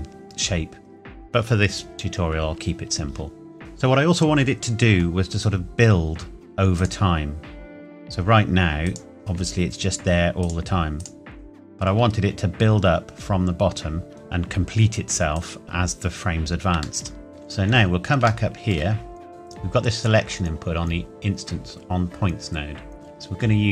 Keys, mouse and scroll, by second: 3.6 shift+middle click, 3.8-6.2 scroll down 1, 6.7 click, 12.1-14.1 scroll down 1, 15.3 click, 17.0 shift+middle click, 17.3-18.2 scroll up 1, 18.4 shift+middle click, 18.7-19.3 shift+scroll up 1, 19.3 click.